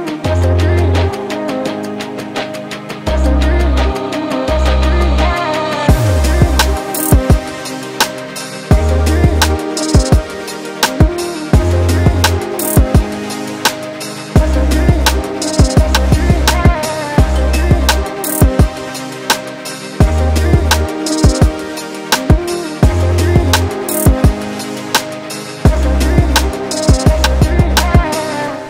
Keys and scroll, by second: 1.4 4, 8.0 2, 12.5 ], 13.6 Delete, 17.4 ], 17.8 Delete, 18.4 ], 25.0 Delete, 25.5 ].